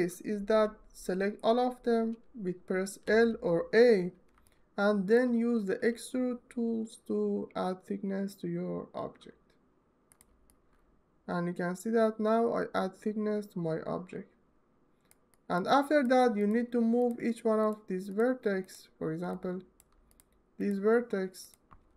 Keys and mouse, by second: 2.8 l, 4.2 alt+middle click, 5.6 e, 16.2 drag, 16.8-17.9 shift+right drag, 19.2-19.6 alt+drag, 21.1 shift+click.